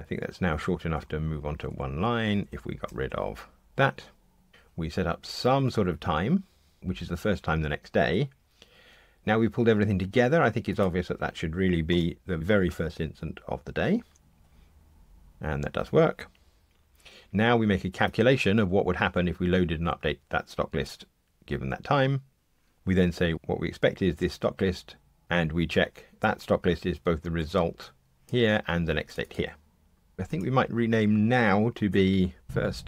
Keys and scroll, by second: 0.4 ctrl+shift+j, 2.8 ctrl+shift+j, 3.3 alt+Return, 4.5 ctrl+shift+j, 14.1 ctrl+r, 31.9 shift+F6.